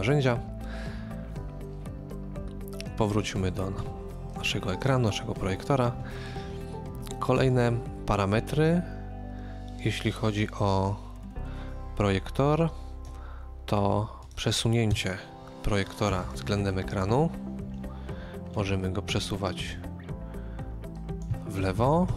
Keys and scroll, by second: 14.9 KP_1, 14.9 KP_0, 21.7 KP_Subtract, 21.9 typing.